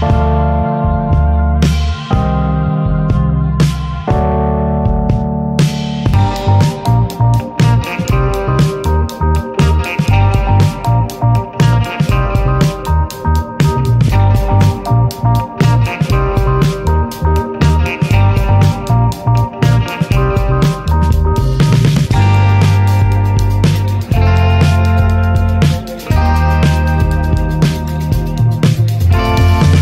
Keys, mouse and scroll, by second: 0.7 Tab, 0.9 click, 1.2 right click, 1.5 drag, 1.7 scroll down 1, 1.8-2.6 middle drag, 2.6 scroll up 1, 3.1-3.5 shift+middle drag, 3.5 scroll up 3, 3.7-5.0 shift+middle drag, 5.0 click, 5.9-8.1 shift+middle drag, 8.1 click, 8.5-9.2 middle drag, 9.2 ctrl+s, 10.5-12.0 drag, 12.0 ctrl+s, 12.7-15.0 middle drag, 15.0-15.6 drag, 16.2-17.1 middle drag, 17.1 scroll down 2, 17.2 middle click, 17.7 scroll up 1, 17.9-19.0 middle drag, 19.0 click, 20.2-21.6 drag, 21.6 t, 22.2 click, 22.4 scroll up 1, 22.7 shift+middle drag, 22.9 click, 23.1 scroll down 2, 23.3 middle click, 23.5 scroll up 3, 28.7 click, 29.5-29.8 middle drag.